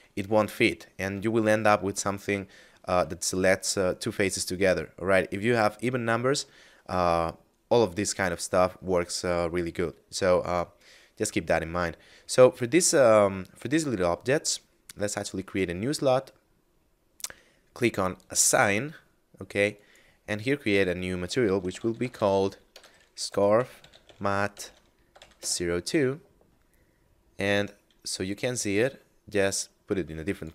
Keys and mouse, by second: 1.3 alt+shift+right click, 2.1 alt+shift+right click, 4.8 shift+middle click, 15.3 click, 18.1 click, 21.4-23.9 typing, 25.0 0, 25.3 Return, 28.7 click.